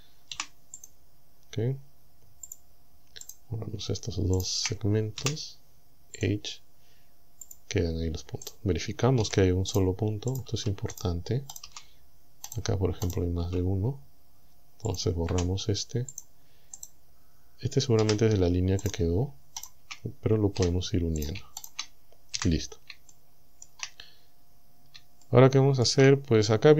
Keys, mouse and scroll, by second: 0.4 Delete, 0.8 click, 2.5 click, 3.3 right click, 4.4 shift+right click, 5.2 Delete, 6.2 click, 7.5 click, 8.5 right click, 9.2 g, 9.8 right click, 10.4 right click, 10.5 g, 11.0 right click, 11.6 right click, 11.7 g, 12.5 right click, 13.1 right click, 13.4 g, 14.9 click, 15.3 Delete, 16.2 click, 16.8 right click, 18.0 g, 18.9 right click, 19.6 shift+right click, 20.6 f, 21.2 right click, 21.6 shift+right click, 22.4 f, 23.1 shift+middle click, 24.5-24.9 scroll up 2, 25.2 shift+middle click.